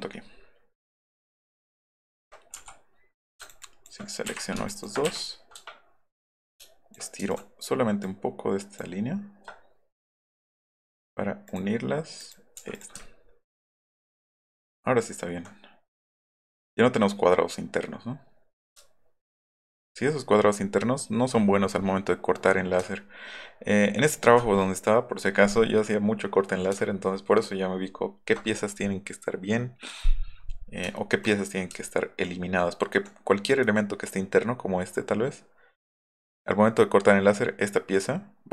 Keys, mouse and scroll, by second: 0.1 alt+middle click, 1.0 alt+middle click, 1.3 alt+middle click, 1.8 alt+middle click, 2.1 alt+middle click, 3.4 ctrl+click, 3.6 ctrl+click, 4.3 Delete, 4.7 ctrl+click, 5.1 Delete, 6.6 ctrl+shift+click, 7.2 ctrl+z, 7.3 ctrl+click, 8.0 ctrl+click, 10.0 click, 10.8 click, 11.5 click, 12.2 click, 12.7 click, 13.1 alt+click, 13.3 alt+middle click, 13.7 alt+middle click, 14.3 alt+middle click, 14.5 alt+middle click, 18.9 alt+middle drag, 19.9 alt+middle click, 20.2 alt+middle click, 20.6 alt+middle click, 22.9-23.3 alt+middle drag, 26.8 alt+middle click, 27.1 alt+middle click, 27.5 alt+middle click, 27.8 alt+middle click, 28.2 alt+middle click, 30.9-31.3 alt+middle drag, 31.7 alt+middle click, 31.9 alt+middle drag, 32.4 alt+middle click.